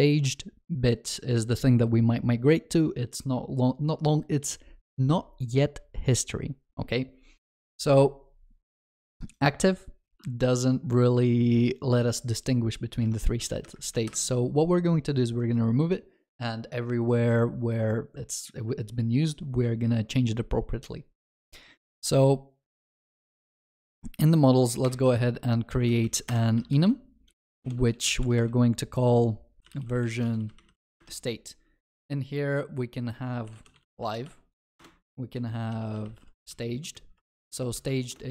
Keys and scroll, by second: 14.1 ctrl+y, 25.0 alt+Insert, 27.6 ctrl+BackSpace.